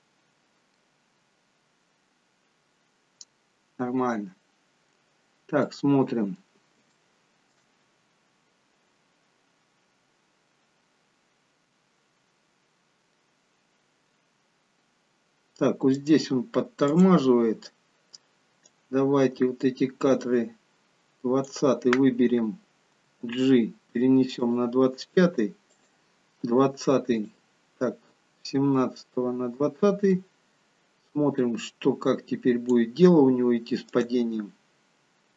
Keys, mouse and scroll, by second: 4.8-5.8 scroll down 3, 5.8 middle click, 5.8-6.8 scroll down 4, 7.0 shift+middle click, 10.4-11.1 scroll up 5, 11.1-12.4 scroll down 1, 16.0 click, 16.8 click, 23.1 g, 26.0 click, 26.5 g, 30.2 click, 34.0 click.